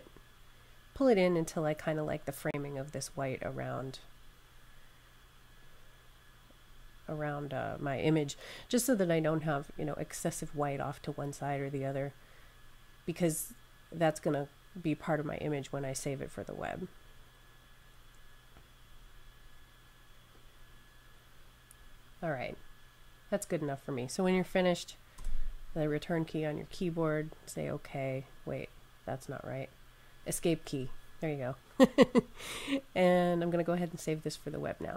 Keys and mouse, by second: 6.1 click, 11.7 click, 18.4 click, 27.5 click, 30.6 Escape.